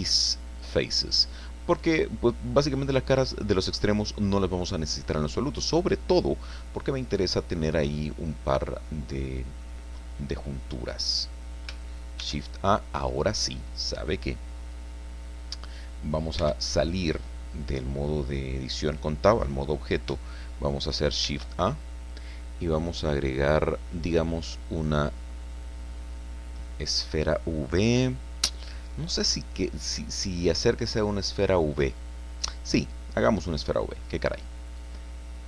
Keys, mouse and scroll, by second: 0.6 click, 1.0-2.8 middle drag, 3.4-3.7 scroll down 2, 3.8-5.3 drag, 5.4 scroll up 2, 6.0-6.3 scroll down 2, 6.5-9.8 drag, 10.9-11.2 scroll up 2, 12.2 shift+a, 16.4 Tab, 21.2 shift+a, 32.4 click, 33.2-34.7 scroll down 2, 34.8 click.